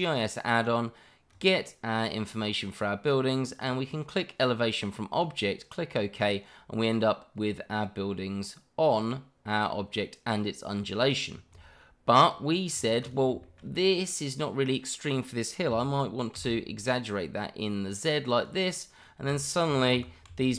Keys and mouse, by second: 6.1-11.3 middle drag, 12.7 click, 13.0 click, 13.4 shift+middle click, 13.7-15.1 middle drag, 15.7 s, 16.3 z, 18.9 click, 19.4 shift+middle drag, 19.9 g, 20.3 z.